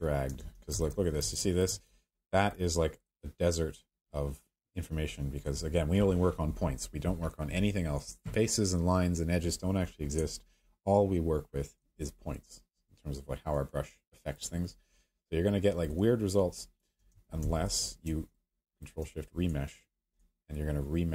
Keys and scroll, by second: 0.4 ctrl+z, 17.1 ctrl+alt+z.